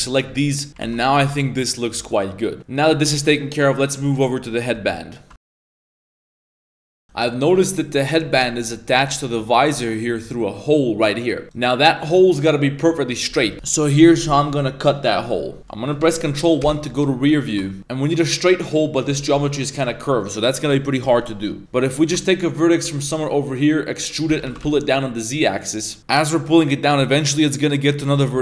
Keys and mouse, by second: 0.0 middle click, 0.5 middle click, 0.8 ctrl+s, 0.9 middle click, 1.2 a, 1.3-2.6 middle drag, 2.6 ctrl+z, 3.0 a, 3.2 middle click, 3.2 a, 13.1 middle click, 15.6 middle click, 15.6 KP_1, 16.6 ctrl+KP_1, 17.5 shift+middle drag, 17.8 Tab, 21.6 ctrl+z, 22.0 shift+middle click, 23.1 e, 24.3 z, 24.5 g, 26.0 g.